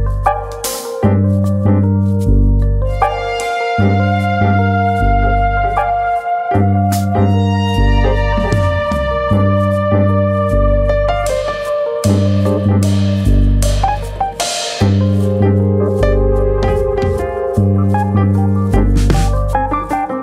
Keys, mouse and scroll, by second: 0.8 click, 1.2 e, 2.1 click, 2.1-3.3 scroll down 11, 3.0 middle click, 4.2 middle click, 4.4-4.8 scroll up 4, 5.2 shift+middle click, 5.2-6.6 scroll up 5, 5.4 shift+middle click, 7.7 ctrl+KP_Add, 8.6 ctrl+KP_Add, 9.4 KP_1, 10.1 shift+middle click, 11.0 r, 12.8 click, 13.4 click, 16.2 alt+click, 17.1 2, 17.6 alt+click, 18.9 alt+click, 19.4 s.